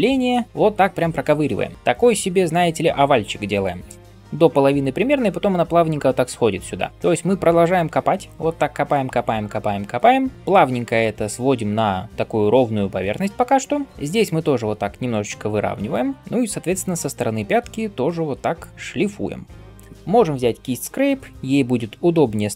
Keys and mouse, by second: 3.8 d, 18.7-22.5 ctrl+shift+middle drag.